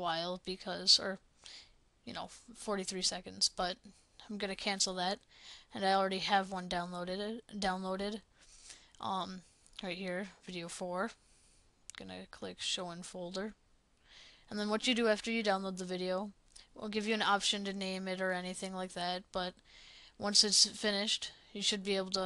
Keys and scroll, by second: 17.9 Delete.